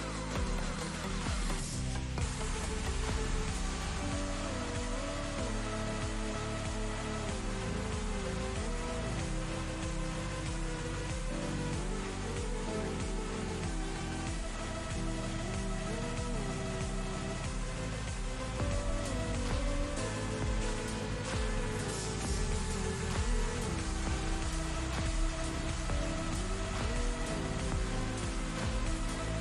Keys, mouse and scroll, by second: 2.3 click, 3.3 click, 4.4 click, 4.7 ctrl+space, 4.8-5.1 ctrl+click, 5.7-7.5 alt+drag, 8.9 alt+click, 9.0 ctrl+space, 9.1-9.9 ctrl+click, 9.2 ctrl+space, 9.6 click, 9.7 space, 11.1-14.8 drag, 16.2-18.4 alt+drag, 20.8-21.7 drag, 23.3 click, 24.3 click, 27.3-29.4 drag.